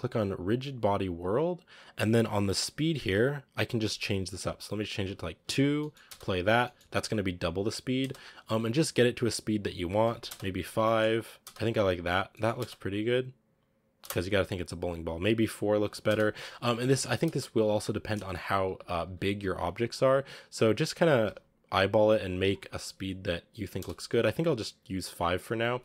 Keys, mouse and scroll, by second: 5.9 space, 6.5-7.9 middle drag, 7.9 space, 8.0-10.1 drag, 10.1 space, 10.7 middle click, 11.3 space, 11.7 click, 12.2 middle click, 12.5 space, 13.9 space, 14.1-15.9 drag, 15.9 space, 17.1 space, 17.3-18.5 scroll down 4, 18.5 a, 18.9 s, 22.9 click, 23.3-23.6 scroll up 4, 23.6 space, 24.0 a, 24.1-24.7 scroll down 4, 25.1 click.